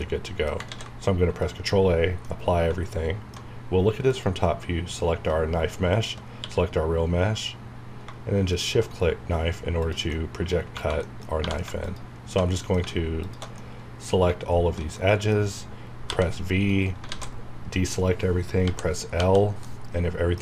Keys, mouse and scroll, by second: 0.0 middle click, 0.7 ctrl+a, 1.4 click, 2.2-4.6 middle drag, 4.1 click, 5.4 scroll down 1, 5.9 shift+click, 6.4 q, 8.5 click, 10.1 middle click, 10.6 scroll up 1, 11.0 middle click, 11.4 1, 11.8 alt+click, 12.5 middle click, 13.2 alt+shift+click, 13.6 shift+middle click, 14.9 shift+middle click, 16.1 v, 16.7 right click, 16.7 right click, 17.1 alt+a, 18.6-19.2 typing, 19.6-20.4 middle drag.